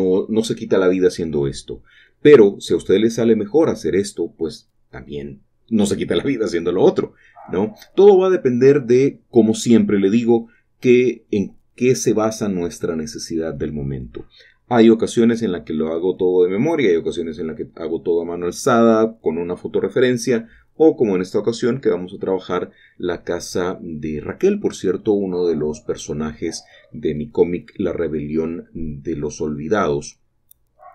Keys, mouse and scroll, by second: 3.3-4.4 shift+drag, 4.4 typing, 9.5-16.3 shift+drag, 22.7 shift+click, 24.6-30.0 shift+middle drag, 24.7 typing, 30.0-30.9 shift+drag, 30.0 typing.